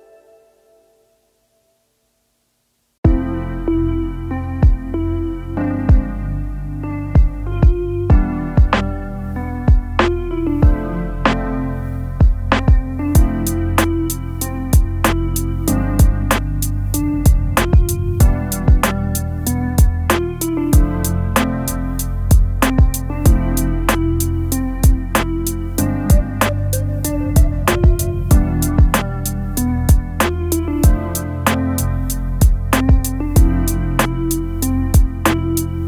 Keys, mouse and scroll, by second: 6.8-7.8 typing, 9.3 t, 10.6 t, 11.0 ctrl+a, 12.5 double click, 14.9 double click, 15.9 ctrl+v, 19.4-20.7 typing, 22.5 8, 25.8 5, 26.1 ctrl+a, 26.6 ctrl+c, 32.7 shift+click.